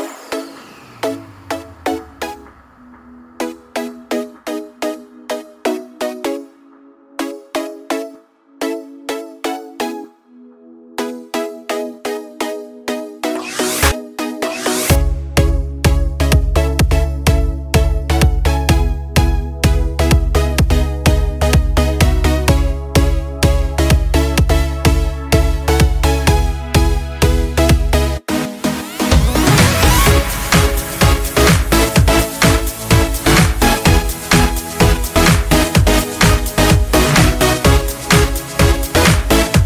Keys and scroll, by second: 19.1-20.0 typing, 24.0 ctrl+space, 33.2 ctrl+d.